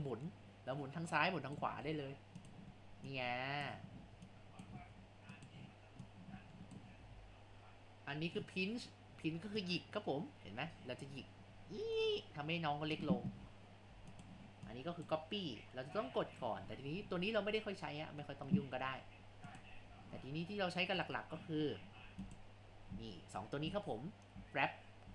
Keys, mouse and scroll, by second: 1.9 ctrl+z, 2.5 click, 3.1-4.2 drag, 4.2 ctrl+z, 4.4 click, 4.9 ctrl+z, 5.3-7.1 drag, 7.1 ctrl+z, 9.1 scroll up 2, 9.6-13.3 drag, 13.3 ctrl+z, 14.1-18.7 drag, 19.5-25.1 drag.